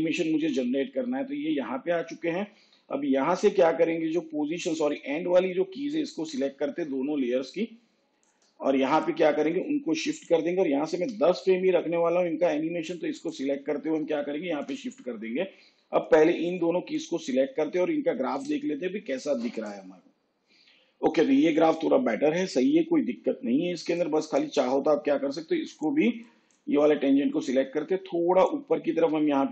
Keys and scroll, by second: 10.9 shift+Page_Down.